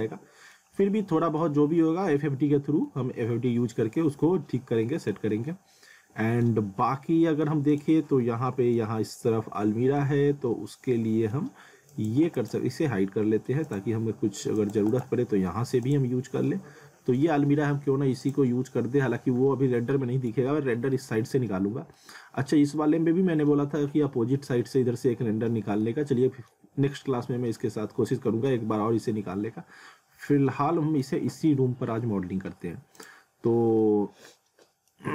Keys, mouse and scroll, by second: 0.9 alt+middle click, 2.2 alt+middle click, 4.4 alt+middle click, 5.3 middle click, 6.6 scroll down 1, 6.9 middle click, 7.7 click, 8.0 scroll up 1, 8.2 middle click, 9.3 scroll down 1, 9.6 middle click, 10.6 middle click, 11.9 click, 12.3 right click, 13.6 click, 14.0 scroll up 1, 14.6 click, 14.9 right click, 15.9 click, 16.3 scroll up 1, 16.4 middle click, 18.2 click, 19.6-19.9 scroll down 1, 19.9 middle click, 21.9 alt+middle click, 23.5 scroll up 1, 25.5 scroll down 1, 25.8 alt+middle click, 30.3 alt+middle click, 33.0 click, 33.8 alt+middle click.